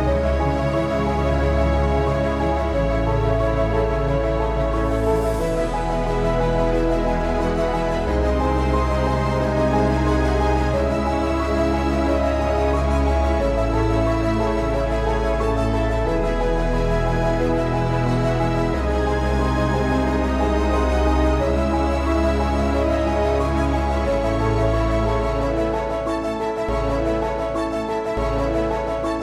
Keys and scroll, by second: 2.8 ctrl+Print, 2.8 /, 4.7 ctrl+Print, 4.7 /, 13.7-15.0 typing, 18.2 typing, 27.8 Delete.